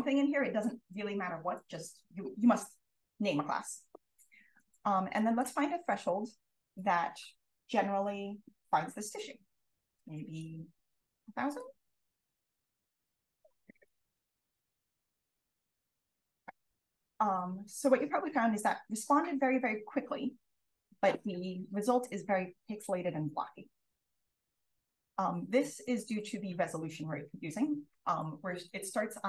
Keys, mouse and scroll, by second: 5.1 click, 9.7-11.0 typing, 13.5-15.0 scroll up 2, 15.0-15.8 scroll up 1, 15.8-16.4 drag, 28.5 click.